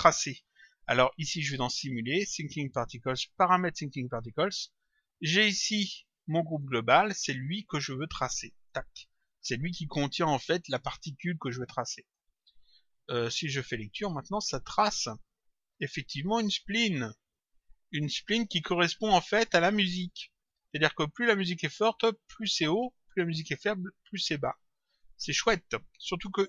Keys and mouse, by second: 1.4 click, 4.0 click, 5.4 click, 7.6 click, 11.9 click, 13.9 click, 24.8 click.